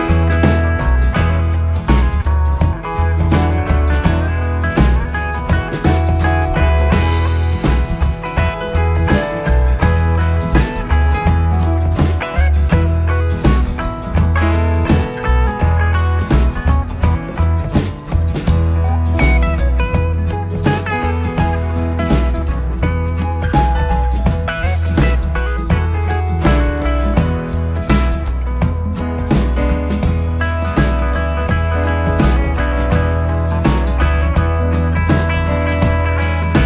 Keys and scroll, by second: 8.4 Delete, 11.4 ctrl+c, 22.9 Right, 23.8 Up, 24.1 Right, 24.2 Up, 25.1 Left, 26.7 ctrl+x, 28.4 Up, 28.7 Down, 29.9 ctrl+=, 30.4 ctrl+z, 30.9 ctrl+-, 32.6 ctrl+=, 34.6 ctrl+-.